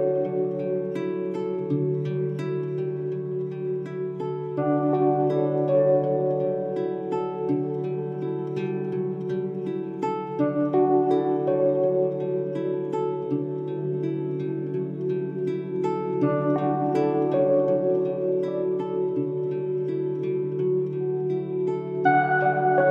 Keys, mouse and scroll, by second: 5.7 a, 6.3 s, 9.1 r, 14.8-16.0 shift+middle drag, 16.0 shift+a, 19.2-21.9 drag.